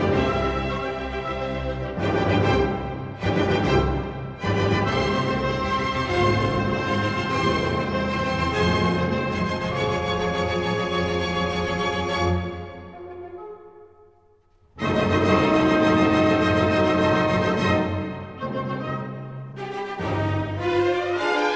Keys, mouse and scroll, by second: 1.6 click, 2.5-2.9 scroll, 4.9 middle click, 6.4 ctrl+middle click, 6.5 middle click, 6.6 middle click, 8.1-9.2 middle drag, 10.7-12.1 middle drag, 13.0 middle click, 17.0 middle click, 19.5-20.6 middle drag.